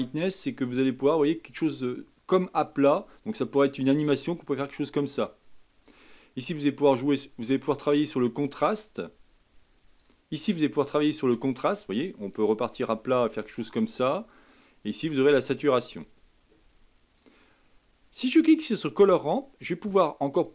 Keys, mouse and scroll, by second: 6.9-9.9 drag, 10.5-13.5 drag, 15.0-17.5 drag, 17.5 scroll down 3, 19.0 click, 19.3 scroll down 3, 20.3 click.